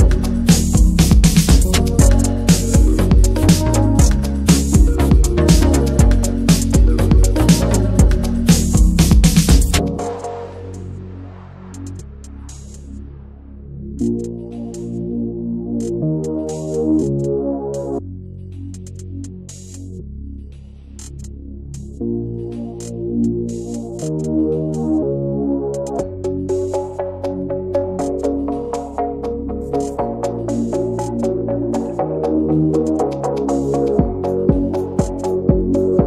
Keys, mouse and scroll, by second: 0.6 alt+z, 0.9-1.4 middle drag, 1.4 Tab, 1.4 drag, 1.6-2.0 middle drag, 2.0 ctrl+s, 2.2 click, 2.3-2.8 right drag, 2.8 click, 3.3 ctrl+s, 3.4 click, 3.6 scroll down 1, 3.8-4.9 middle drag, 4.9-5.4 drag, 5.4 Tab, 5.5 middle click, 5.6 scroll up 1, 5.8 shift+middle click, 6.5 scroll up 1, 6.7 middle click, 7.5-8.4 right drag, 8.4 scroll down 2, 8.6 middle click, 9.3 ctrl+z, 9.6 Tab, 9.8 click, 10.0 ctrl+a, 10.3 Tab, 10.5-10.9 shift+middle drag, 10.9 scroll up 1, 12.1 g, 13.5 ctrl+z, 14.3 ctrl+b, 17.0 Tab, 17.0 drag, 17.2 scroll down 2, 17.3 middle click, 17.5 ctrl+s, 17.8 Tab, 17.9 click, 18.5 alt+shift+click, 18.6 alt+shift+click, 18.8 middle click, 18.9-19.7 scroll up 1, 19.7 click, 20.8 scroll down 2, 20.9 middle drag, 21.1 Tab, 21.2 drag, 21.4 middle click, 21.6-22.1 scroll up 2, 21.7 middle drag, 22.1 ctrl+z, 22.3 ctrl+z, 22.5 scroll up 1, 22.7 middle click, 23.5 click, 24.4 ctrl+z, 25.0 scroll up 2, 25.1 middle click, 25.6 ctrl+b, 27.1 click, 27.7 middle click, 28.3 click, 28.8 Tab, 28.9 click, 29.0 scroll down 3, 29.1 alt+middle click, 29.6-30.1 drag, 30.1 ctrl+1, 30.3 ctrl+2, 30.7 scroll down 1, 30.8-31.4 middle drag, 31.4 drag, 31.6 middle click, 31.7-32.4 scroll up 2, 32.4 ctrl+s, 32.5 click, 32.8 click, 33.1 middle click, 33.2 Tab, 33.5 middle click, 33.6 scroll up 1, 33.8 shift+middle click, 34.1 shift+scroll up 1, 34.3 middle click, 34.7 alt+shift+click, 35.3 middle click, 35.5-35.9 scroll up 2, 35.7 shift+middle click.